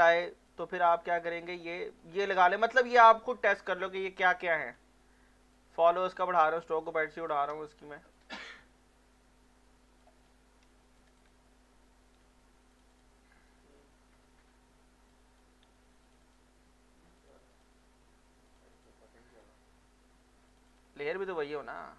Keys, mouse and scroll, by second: 0.5 alt+click, 1.2 alt+click, 1.7 alt+middle click, 3.0 alt+middle click, 3.6 alt+middle click, 5.5 click, 6.4 click, 7.4 click, 8.1-10.2 ctrl+drag, 10.2 ctrl+scroll down 1, 11.0 click, 12.2 x, 12.7 click, 15.6 x, 16.0 click, 21.4 scroll up 1.